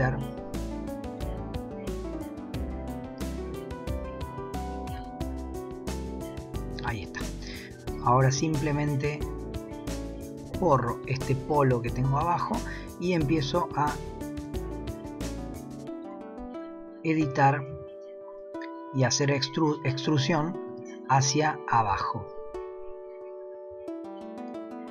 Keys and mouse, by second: 1.7 click, 3.3 shift+middle click, 4.7 s, 7.1 shift+middle click, 7.9 click, 10.4 x, 12.4 alt+click, 14.3 g, 17.2 e, 18.3 click, 20.7 e, 24.5 s.